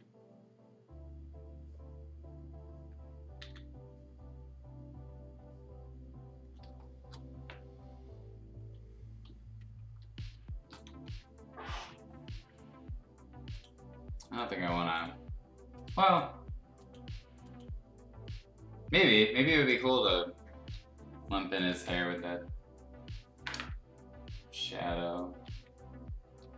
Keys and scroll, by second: 3.3 ctrl+z, 6.6 space, 9.2 z, 10.3 space, 10.8 b, 21.7 ctrl+z, 25.2 ], 25.5 ], 26.2 ].